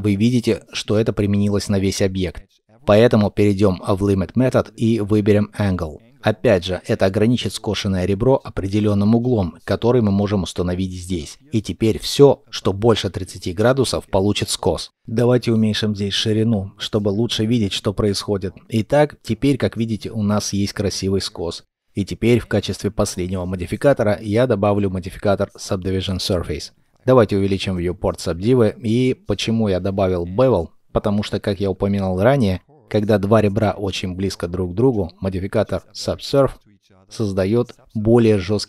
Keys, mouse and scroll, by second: 15.7 shift+click, 19.2 shift+middle click, 20.8-21.3 scroll, 21.3 shift+middle click, 29.4 shift+middle click, 30.2 ctrl+middle click, 34.9 ctrl+middle click.